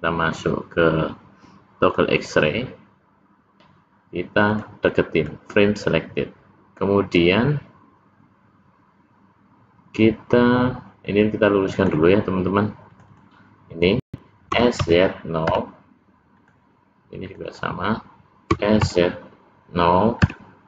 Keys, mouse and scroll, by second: 1.9 click, 4.6 click, 11.8 click, 13.0 click, 13.1 click, 14.5 s, 17.2 click, 17.5 click, 18.5 s.